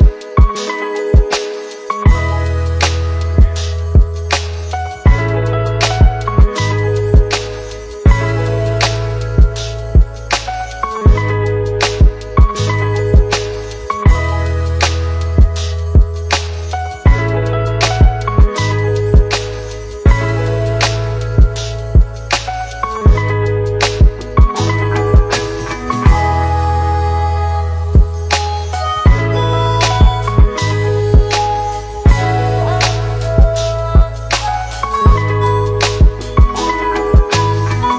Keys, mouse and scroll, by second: 2.3 shift+click, 13.5-14.8 click, 23.8 click, 33.5 click, 35.4 shift+click.